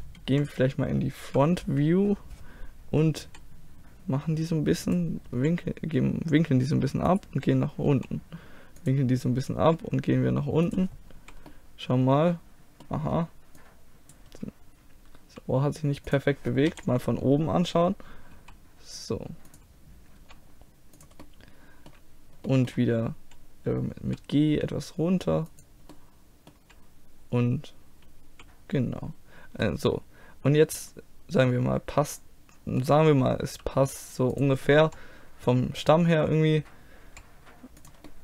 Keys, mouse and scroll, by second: 0.4 KP_1, 1.3 KP_3, 3.3 r, 5.4 g, 7.9 r, 9.6 g, 11.2 z, 11.5-13.6 middle drag, 13.6-15.6 drag, 15.3 g, 16.7 KP_7, 18.4 r, 20.2 g, 21.3-24.1 middle drag, 24.1 g, 26.0-31.5 middle drag, 33.6 g, 34.9 r, 37.1 g, 38.1-38.2 middle drag.